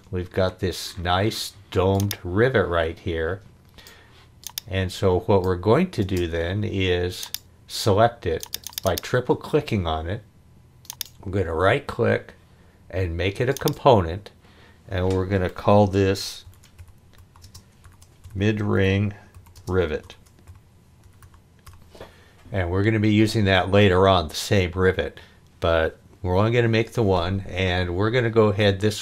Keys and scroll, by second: 6.0 space, 16.2-22.1 typing.